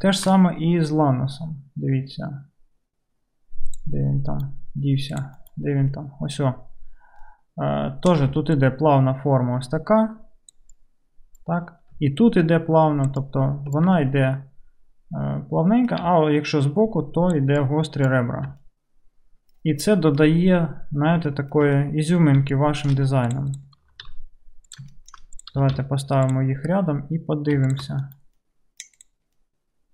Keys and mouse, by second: 3.9-5.2 right drag, 4.3 KP_Decimal, 5.2 middle click, 5.3-8.0 right drag, 5.5 KP_Decimal, 8.0-18.3 drag, 8.3 d, 8.7-23.6 middle drag, 8.7-18.3 right drag, 10.6-12.0 typing, 13.1 d, 13.3 d, 13.9 d, 16.1-18.5 d, 23.6-27.8 right drag, 23.9 g, 25.4 click, 25.6 g, 27.8 shift+click, 28.1-29.9 right drag, 28.1 g, 28.1 KP_Decimal.